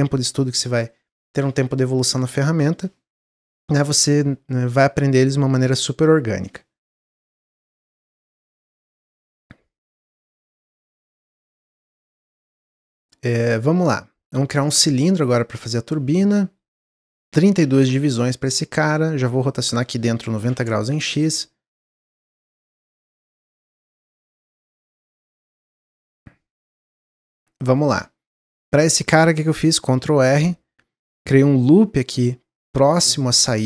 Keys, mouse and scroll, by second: 9.0 middle click, 9.5 scroll up 2, 9.8-10.9 middle drag, 10.9-14.1 drag, 15.1 scroll down 1, 16.8-22.0 drag, 23.6 Tab, 23.8 middle click, 24.3 click, 24.6 middle click, 25.0 click, 25.8 click, 27.2 middle click, 27.4-27.8 scroll up 1, 27.8 shift+middle click, 28.3-28.7 scroll up 1, 29.7 ctrl+r, 32.9 middle click, 33.3 scroll up 1.